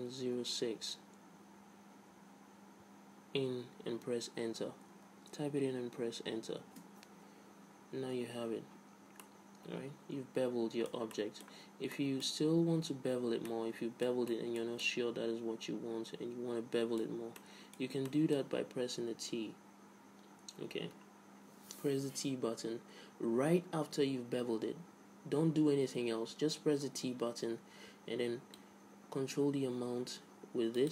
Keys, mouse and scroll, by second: 9.6-11.0 middle drag, 11.6-14.8 middle drag, 13.1 z, 13.5 z, 14.9-17.1 middle drag, 15.0 z, 17.5 z, 17.8-20.5 middle drag, 19.6 t, 29.0-30.7 drag.